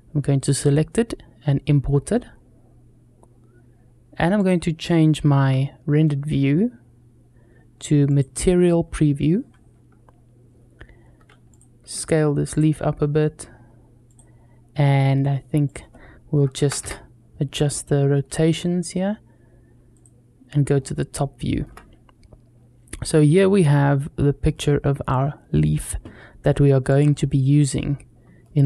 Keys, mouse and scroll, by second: 4.2 click, 5.2 z, 11.3 click, 11.6 s, 13.9 click, 15.5-16.7 drag, 19.7 click, 20.5 scroll up 2, 20.9 shift+middle click, 22.9 scroll up 1, 23.4-23.8 scroll down 1, 23.8-24.3 scroll down 1, 24.3-25.5 middle drag, 26.7 click, 27.8 scroll up 1, 28.2-28.6 shift+middle drag.